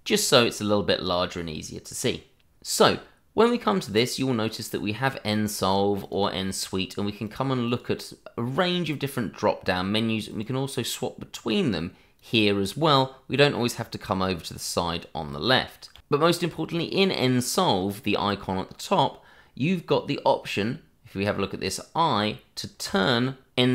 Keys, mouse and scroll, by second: 5.3 click, 7.7 double click, 8.5 click, 15.9 d, 22.8 click.